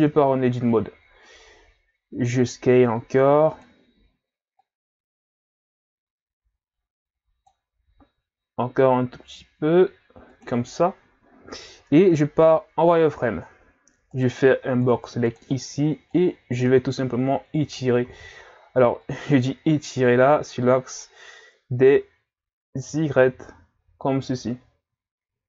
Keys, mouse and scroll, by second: 2.2 s, 4.6 click, 7.9 s, 11.5-12.0 scroll up 1, 12.0-12.4 scroll down 2, 12.4 z, 13.1-14.1 scroll up 1, 14.1 right click, 14.5 b, 16.1 click, 18.1 ctrl+z, 19.0 click.